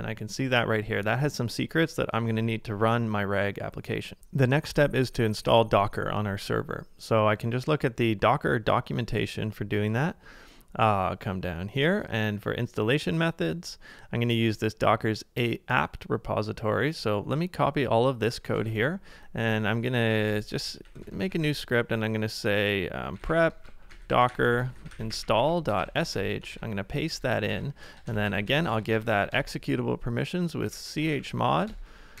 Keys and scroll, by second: 1.0 typing, 4.2 super+Tab, 18.6 super+Tab, 19.9-21.5 typing, 22.8-24.1 typing, 26.5 super+v, 27.1 Return, 27.5 ctrl+d, 27.7-28.9 typing, 30.4-32.2 typing, 31.8 Tab.